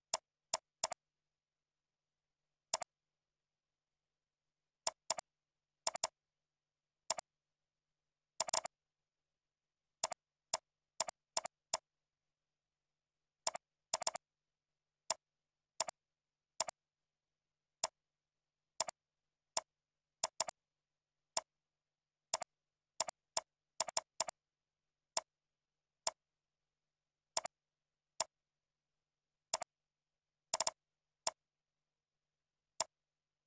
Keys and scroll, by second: 1.1 ctrl+Up, 1.6 ctrl+z, 2.9 ctrl+Up, 3.9 ctrl+Left, 13.8 ctrl+c, 14.6 ctrl+v, 20.0 ctrl+c, 20.8 ctrl+v, 23.7 ctrl+c, 24.9 ctrl+v, 28.8 ctrl+z.